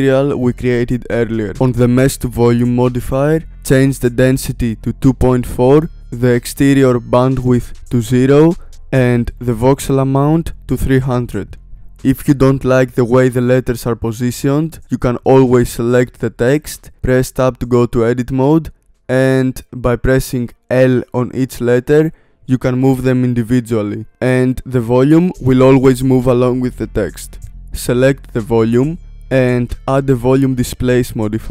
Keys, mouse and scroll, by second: 1.5 click, 2.5-4.4 drag, 8.1 click, 11.5 KP_0, 12.5 click, 14.8 click, 17.4 Tab, 20.1 alt+z, 21.5 l, 22.1 g, 24.1 click, 25.0 l, 25.5 g, 27.2 Tab, 27.5 click, 27.7 click.